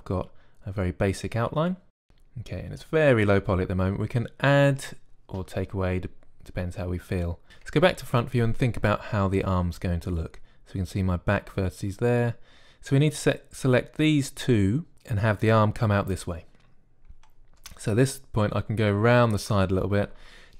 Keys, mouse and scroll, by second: 0.0-2.0 typing, 2.6-4.3 drag, 7.8 KP_1.